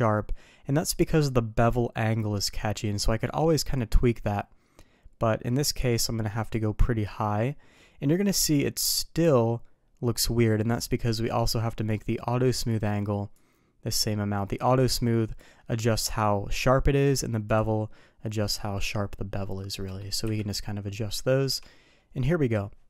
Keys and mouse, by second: 3.2-6.5 drag, 13.3-15.4 drag, 17.4 click, 19.5 middle click, 20.2 KP_3, 21.2 shift+middle drag.